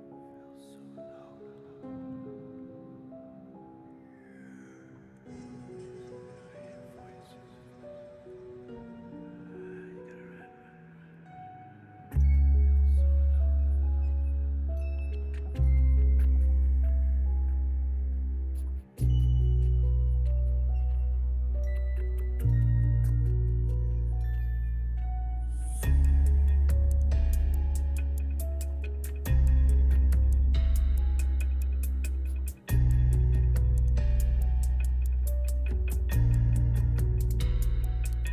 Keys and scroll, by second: 1.9 Tab, 2.7 a, 5.3 Tab, 8.5 Tab, 9.4 s, 10.6 Tab, 11.6 alt+a, 19.5 0, 19.8 Return, 23.3 2, 23.5 Return, 36.6 8, 36.9 ., 37.0 3, 37.4 Return.